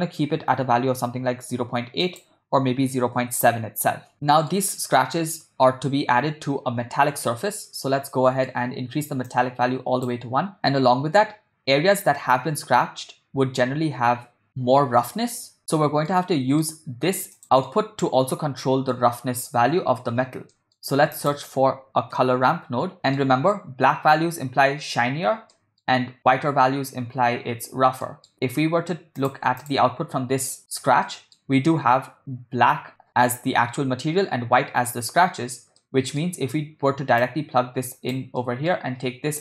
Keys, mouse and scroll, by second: 2.1-3.5 drag, 4.3-4.6 shift+middle drag, 7.7 middle click, 9.3-10.3 drag, 15.8 ctrl+middle click, 16.2 middle click, 17.4 click, 17.4 middle click, 18.6 middle click, 20.6 middle click, 21.1 shift+a, 23.0 middle click, 25.5 middle click, 28.0 middle click, 29.2 click, 29.8 ctrl+shift+click, 31.1 middle click, 35.8 middle click, 37.2-38.3 drag, 38.4 middle click.